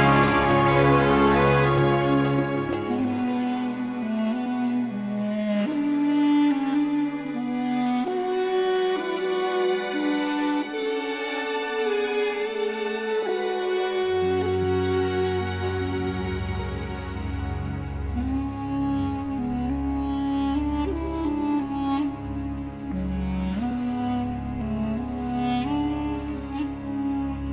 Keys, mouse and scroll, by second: 0.0-0.5 scroll down 1, 0.7 scroll up 2, 1.5 scroll down 2, 2.2 click, 3.0 click, 4.1 click, 5.9 click, 7.4 click, 8.7 click, 10.4 1, 11.8 0, 12.6 click, 13.4 click, 15.7-19.4 drag, 19.6 1, 20.5-20.8 scroll down 2, 21.1 scroll up 2, 22.6 click, 23.7 scroll up 1, 25.5-26.9 drag.